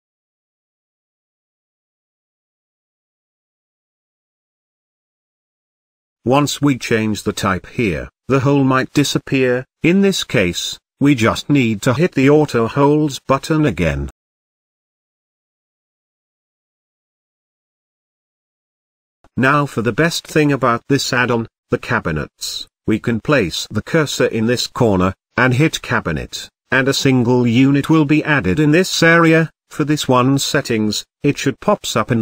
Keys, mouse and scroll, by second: 1.4 click, 3.1 click, 4.9-7.9 drag, 8.8 alt+z, 9.3-9.6 scroll up 1, 9.6-10.9 scroll down 1, 11.4 click, 11.9 alt+z, 12.2-12.5 scroll down 4, 12.5 middle click, 12.9-13.3 scroll up 3, 13.3-15.1 middle drag, 15.1-16.6 drag, 16.6-18.4 middle drag, 18.5-19.5 drag, 19.5 scroll down 3, 19.8-21.1 middle drag, 21.1 scroll up 1, 21.3-21.7 shift+middle drag, 21.7-22.7 scroll up 3, 22.7-24.5 shift+right drag, 26.4 click, 27.3-27.6 scroll down 1, 27.6-28.3 shift+middle drag, 28.3-28.6 scroll down 4, 28.6-29.7 shift+middle drag, 29.7 n, 30.2-31.8 middle drag, 31.8 scroll up 4, 32.0-32.2 middle drag.